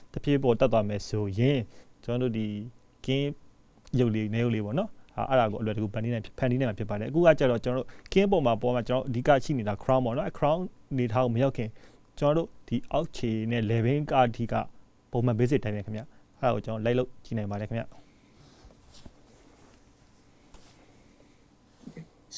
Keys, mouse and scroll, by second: 0.8 s, 9.5 shift+middle click, 10.2 e, 18.5 s.